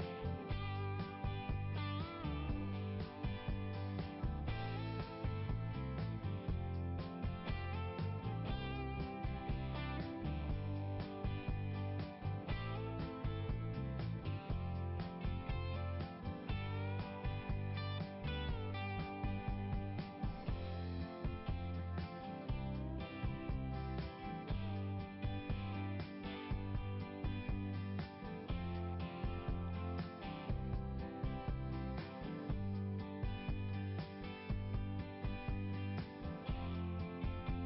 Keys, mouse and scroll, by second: 1.1 click, 1.8 click, 2.7 click, 4.4 click, 6.3 click, 7.4 click, 8.5 click, 19.1 click, 19.4 click, 21.1 click, 23.5 scroll down 1, 25.1 scroll up 1, 26.7 click, 27.4 click, 29.1 click, 29.7 click, 32.2 click, 32.5 click, 34.7-35.5 scroll up 3.